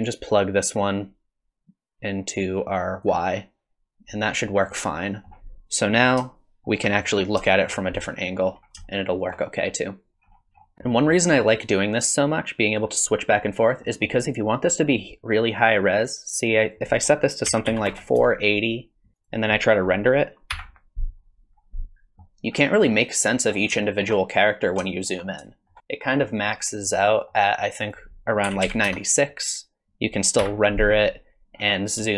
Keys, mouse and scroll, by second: 0.7 click, 4.8 middle click, 6.3 shift+middle click, 7.1-7.4 scroll up 3, 7.4 shift+middle click, 7.9 middle click, 8.5-8.9 scroll up 2, 8.9 shift+middle click, 9.7 middle click, 10.1 middle click, 10.1 scroll down 9, 10.3-11.1 scroll up 9, 10.9 middle click, 12.3 click, 13.8 middle click, 16.6 click, 19.2 click, 27.2 middle click, 27.8 click.